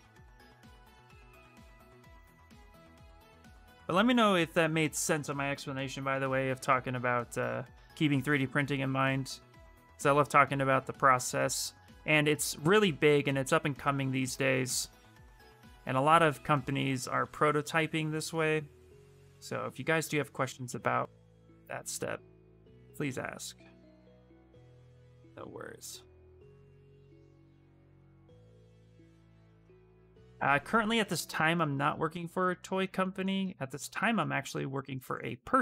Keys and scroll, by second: 16.0 s.